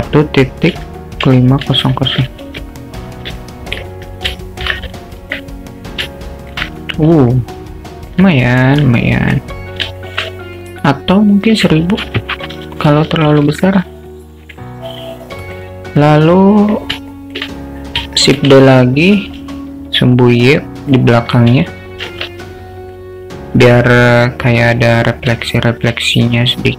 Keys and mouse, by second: 1.8 0, 3.6 alt+middle click, 4.4 shift+middle click, 5.2 alt+middle click, 6.3 alt+shift+middle drag, 7.4 alt+middle click, 9.1 alt+middle click, 10.1 alt+shift+middle click, 10.4 alt+middle drag, 11.7-14.5 drag, 13.3 0, 13.4 0, 15.2-15.6 alt+middle drag, 16.0 alt+middle click, 17.2 alt+shift+middle click, 18.6 shift+d, 22.2 shift+t, 24.0-24.7 alt+middle drag, 25.5 alt+shift+middle drag, 26.4 click.